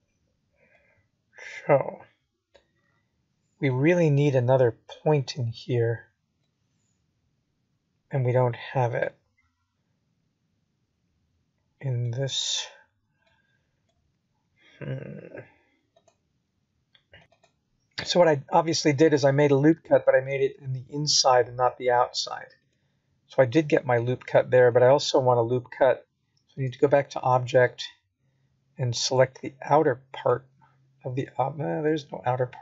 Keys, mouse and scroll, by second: 3.2 middle click, 4.1-5.0 scroll down 1, 5.0 middle click, 7.8 p, 11.5 Tab, 13.2 click, 14.0 g, 16.5 ctrl+z, 16.9 ctrl+z, 17.7 middle click, 19.4 middle click, 22.4 middle click, 25.1 middle click, 32.0 middle click.